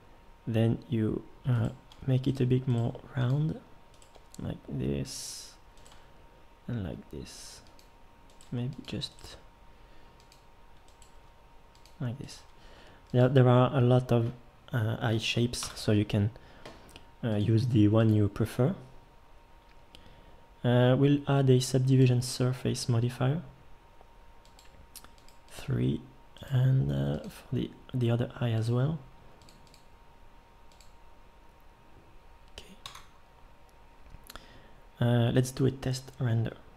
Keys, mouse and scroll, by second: 1.9 g, 2.8 g, 4.2 g, 5.9 g, 8.4 g, 9.2 g, 11.2 g, 12.4 g, 15.6 Tab, 32.9 z.